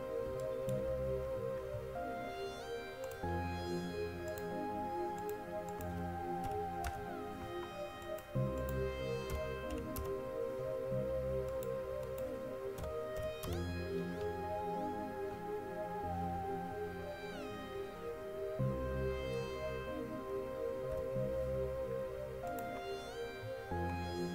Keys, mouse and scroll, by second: 15.5 middle click, 15.5 scroll down 1, 16.3 middle click, 16.3-16.9 scroll down 1, 17.4 middle click, 17.4 scroll up 1, 18.4 middle click, 18.4 scroll down 1, 21.1 KP_1, 22.7-24.3 drag.